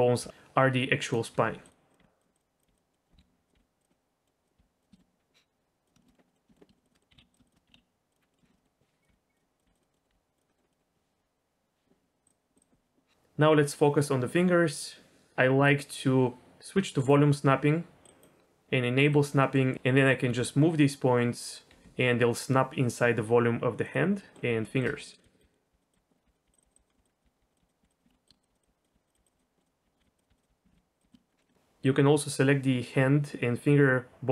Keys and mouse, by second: 0.2 g, 0.9 click, 1.3-4.6 typing, 1.9 click, 2.3 click, 2.9 middle click, 3.9 middle click, 4.9 shift+middle click, 5.8 click, 6.0 shift+middle click, 6.2 middle click, 6.5 shift+middle click, 6.7 shift+middle click, 6.8 shift+click, 6.9 middle click, 7.1 g, 7.4 shift+click, 7.7 g, 8.3 middle click, 8.4 shift+middle click, 8.6 middle click, 9.1 g, 9.6 click, 9.6 g, 9.8 middle click, 10.0 middle click, 10.1 g, 10.5 middle click, 10.7 middle click, 12.2 click, 12.6-18.2 drag, 19.5 middle click, 20.3 g, 21.7 g, 24.3 click, 24.3 middle click, 25.0 click, 25.0 middle click, 25.2-31.0 typing, 25.4 click, 25.5 click, 25.5 middle click, 26.1 middle click, 26.4 click, 26.6 click, 26.9 middle click, 27.2 click, 27.7 click, 28.0 ctrl+click, 28.8 click, 28.8 middle click, 29.1 click, 29.4 click, 29.6 click, 30.2 click, 30.4 click, 31.2 middle click, 31.5 shift+middle click, 31.9-34.3 drag.